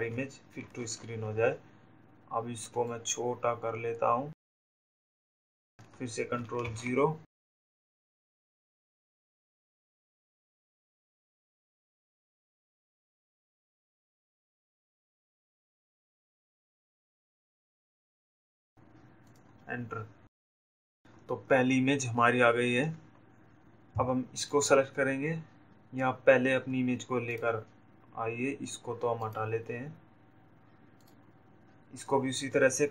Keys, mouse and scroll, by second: 2.9 ctrl+0, 7.2 ctrl+0, 8.0 click, 9.3 shift+click, 12.1 shift+click, 13.3 click, 14.7 shift+click, 20.2 click, 29.8 click, 31.1 click.